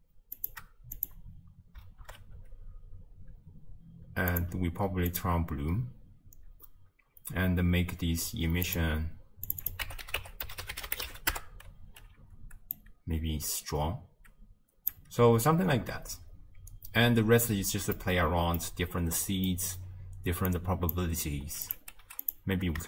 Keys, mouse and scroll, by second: 1.1-2.1 drag, 2.1 shift+space, 3.3 space, 5.1 click, 9.5-11.3 drag, 11.3 s, 13.0-15.3 drag, 15.3 space, 17.3 space, 20.5-22.3 drag.